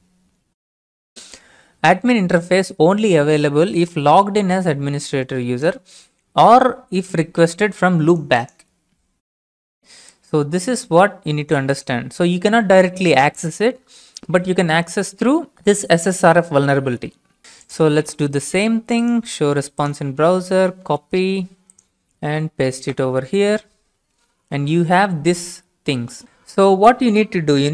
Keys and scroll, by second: 14.1 alt+Tab, 20.9 alt+Tab, 22.2 ctrl+v, 22.8 Return.